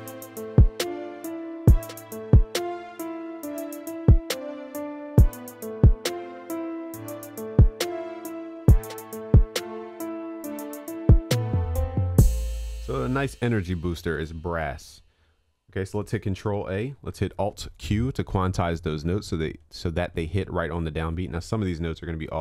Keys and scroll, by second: 14.7 ctrl+s, 15.9 ctrl+a, 17.2 alt+q, 17.4 alt+Return.